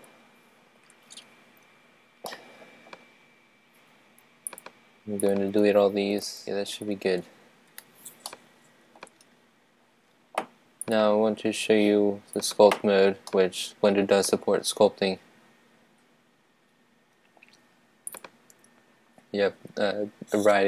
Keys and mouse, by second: 0.0 Escape, 2.2-4.2 middle drag, 4.5-6.0 drag, 6.4 x, 6.8 Return, 8.2-10.3 middle drag, 10.9-12.8 drag, 13.3-15.1 middle drag, 18.1-20.6 drag.